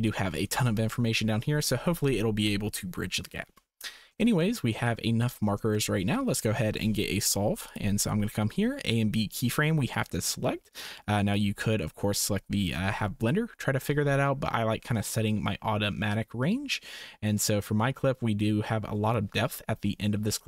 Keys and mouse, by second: 0.2 shift+click, 4.5 shift+click, 5.8 shift+click, 10.7 click, 15.0-19.3 drag.